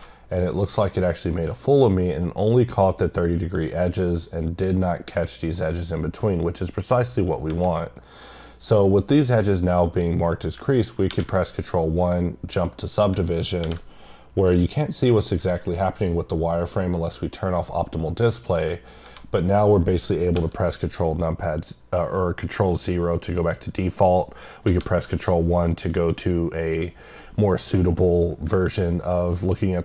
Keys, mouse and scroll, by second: 1.3 middle click, 3.4 scroll down 1, 3.5 middle click, 5.1 middle click, 8.0 middle click, 14.6 click, 15.9 click, 16.9 click, 17.8 middle click, 18.4 scroll down 1.